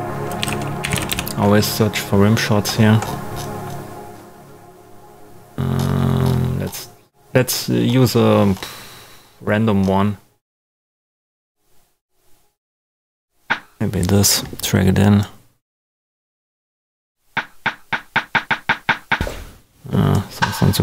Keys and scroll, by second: 0.4 super+a, 0.7-1.5 typing.